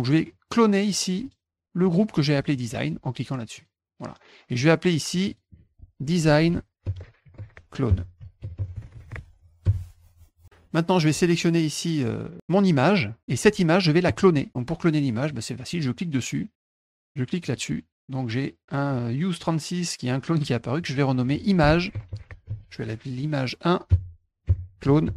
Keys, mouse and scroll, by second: 1.2 click, 1.8 click, 3.5 click, 5.1 click, 5.3 click, 5.9-9.6 typing, 13.2 click, 15.2 click, 15.7 click, 17.4 click, 20.8 click, 20.9 click, 21.6-23.0 typing, 24.2-25.1 typing.